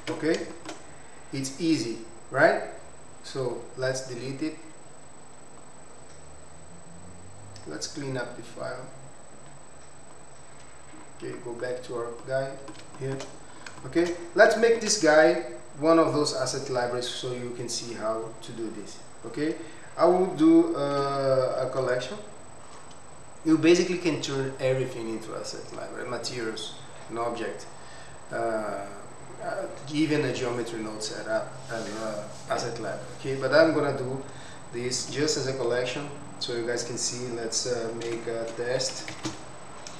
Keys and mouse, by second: 0.0 Tab, 0.5 shift+middle drag, 3.5 click, 3.9-7.6 right drag, 7.8-10.3 drag, 12.2-12.7 middle drag, 12.9 shift+middle click, 13.7 shift+middle drag, 14.6 shift+middle click, 19.3 click, 20.9 m, 35.0 m.